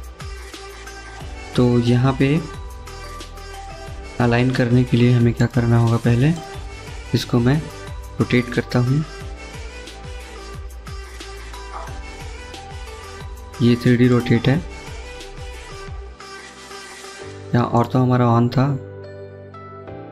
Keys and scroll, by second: 0.0-1.3 typing, 2.7 Escape, 2.9 Escape.